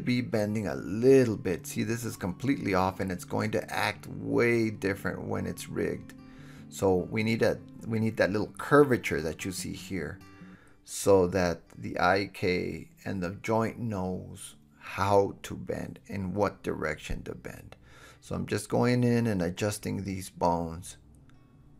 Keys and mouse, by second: 1.7 shift+middle click, 1.7 shift+right click, 2.0 shift+middle click, 2.0 shift+right click, 2.2 shift+middle click, 2.3-5.4 shift+drag, 2.7 shift+h, 3.6 KP_1, 5.4-6.3 middle drag, 5.9 g, 6.3 click, 6.5-6.8 middle drag, 6.8 g, 7.2 click, 7.8 g, 8.1-8.5 drag, 9.2 g, 9.7-15.8 drag, 15.1 KP_7, 15.9 alt+h, 16.3 click, 16.3 middle click, 16.3 right click, 17.6 shift+h, 18.0 KP_1, 18.6-19.6 drag, 18.6-19.6 middle drag, 18.6-19.6 right drag, 19.0 g, 20.4 g, 20.7-21.2 drag.